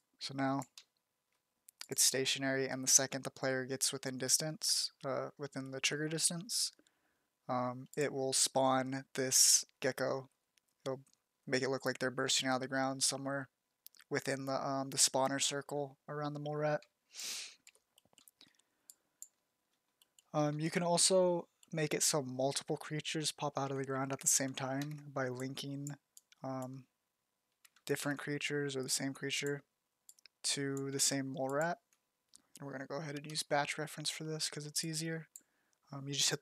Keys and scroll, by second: 8.9 z, 10.4 z, 10.9 z, 11.8 z, 16.4 z, 17.2 f, 24.4 ctrl+d, 27.6 ctrl+d.